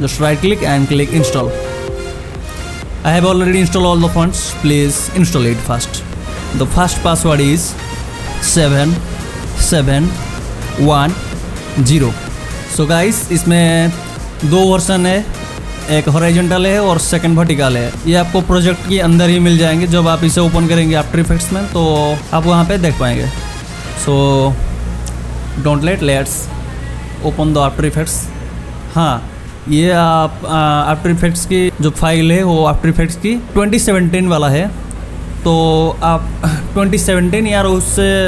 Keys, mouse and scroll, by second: 0.3 right click, 0.9 click, 9.0 click, 12.8 click, 31.6 click.